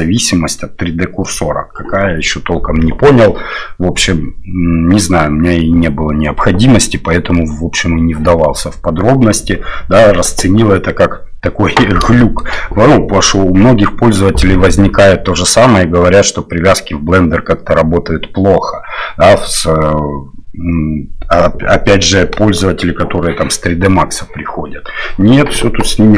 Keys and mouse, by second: 12.2 shift+middle click.